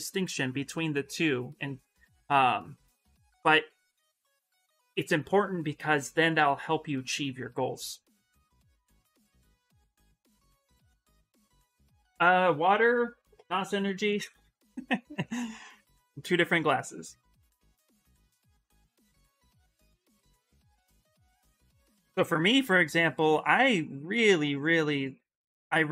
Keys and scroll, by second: 15.7 s, 17.6-18.5 typing.